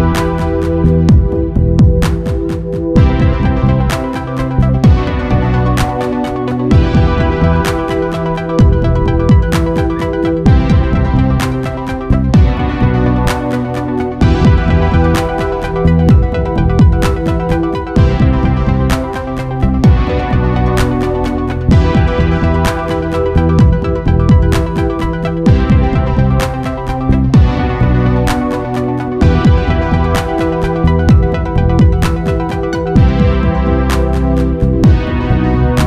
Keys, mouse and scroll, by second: 1.6 click, 2.2-3.4 middle drag, 3.4 alt+a, 10.7 Escape, 17.6-22.1 middle drag, 26.4-27.8 middle drag, 28.3-30.2 middle drag, 31.5-32.9 middle drag, 33.5-35.8 middle drag.